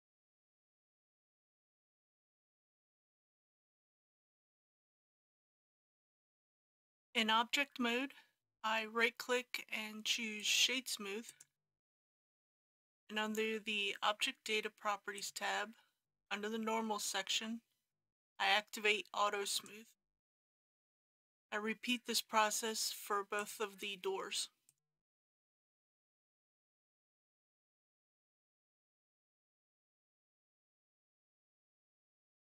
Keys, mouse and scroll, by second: 0.3 alt+shift+click, 0.4 middle click, 1.1 ctrl+b, 1.3 click, 1.9 KP_Decimal, 2.3 click, 2.5 Tab, 2.9 click, 3.2 Tab, 3.4 click, 3.5 Tab, 3.8 3, 4.0 click, 4.2 middle click, 4.5 middle click, 4.7 shift+2, 4.8 middle click, 5.0 alt+shift+click, 5.2 ctrl+b, 5.4 click, 5.8 KP_Decimal, 6.2 click, 6.3 Tab, 6.5 click, 10.4 right click, 11.3 click, 24.7 right click, 25.6-28.5 drag, 29.3 right click, 30.7 click.